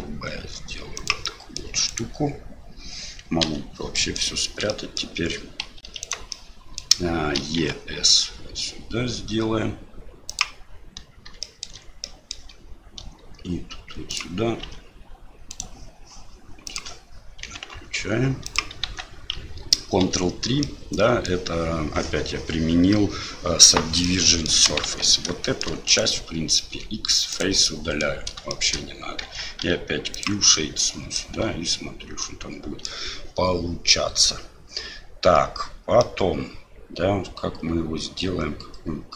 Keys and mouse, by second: 1.4 click, 1.9 click, 3.4 KP_Divide, 4.0 middle click, 4.7 middle click, 5.9 3, 6.0 click, 6.3 middle click, 7.4 e, 11.5 shift+middle click, 12.2 middle click, 14.6 s, 16.7 click, 17.4 s, 18.8 Tab, 20.0 ctrl+3, 20.6-21.3 middle drag, 24.0 middle click, 24.8 Tab, 25.4 shift+middle click, 25.9 click, 26.7 x, 27.7 click, 28.5 shift+click, 29.2 Tab, 29.6 q, 30.5 click, 30.6 middle click, 31.3 Tab, 32.2 click, 32.6 middle click, 36.0-39.1 middle drag.